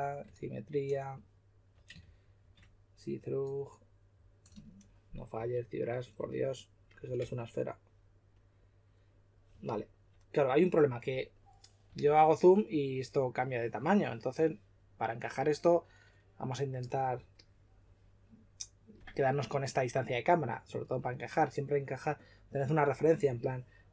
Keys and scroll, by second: 2.0-2.3 typing, 5.3 w, 7.1 w.